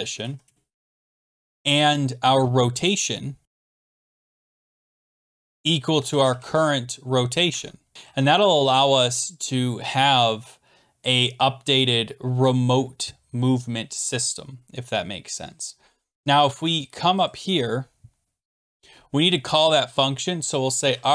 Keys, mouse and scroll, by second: 0.2 Down, 0.4 Return, 1.2 Return, 3.2-7.0 typing, 7.5 Tab, 17.3-18.6 drag, 19.4 Return, 20.6-21.1 typing.